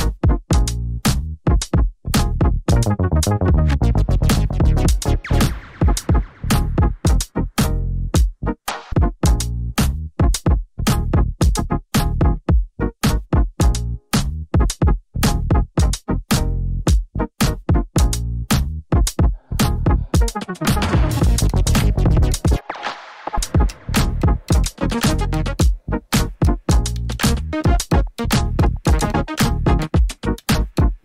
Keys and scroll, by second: 2.1-3.1 typing.